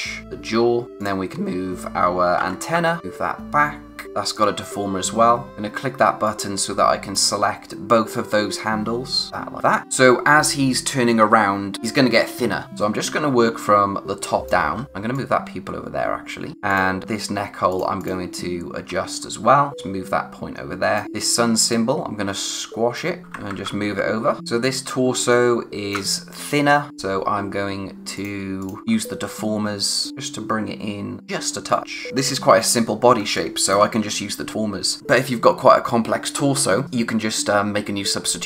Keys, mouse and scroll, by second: 0.2-1.0 scroll up 1, 1.0 click, 2.4-2.8 typing, 3.0 click, 5.5 click, 9.5 click, 9.6 scroll down 1, 9.8 space, 12.6 space, 13.6 click, 14.0 space, 14.8 scroll up 1, 14.8 click, 16.5 scroll up 1, 16.7 click, 21.0-21.7 scroll up 1, 21.7 click, 23.2 Right, 24.8 scroll down 1, 25.0 space, 25.3 click, 25.5 space, 28.2 click, 28.8-30.1 scroll up 1, 30.1 click, 32.1 space, 32.3-32.6 scroll down 1, 33.2 space, 33.4 click, 33.7 space.